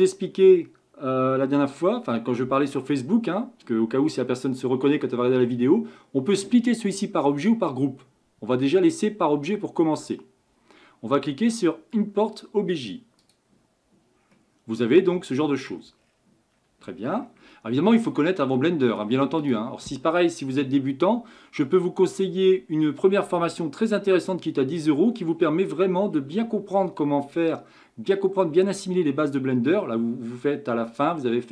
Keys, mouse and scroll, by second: 14.6-16.0 middle drag, 16.0-17.1 scroll up 1, 17.1-17.5 scroll down 2, 17.5-19.0 shift+middle drag, 19.0-19.4 scroll up 1, 19.4-22.4 drag.